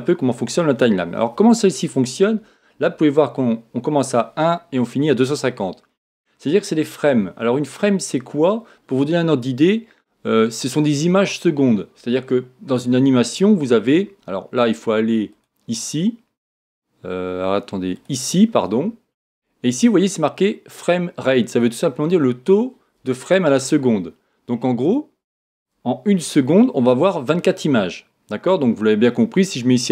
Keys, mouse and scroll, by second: 0.0-15.4 drag, 13.0 scroll down 1, 13.5-15.1 scroll up 1, 25.1-29.9 drag.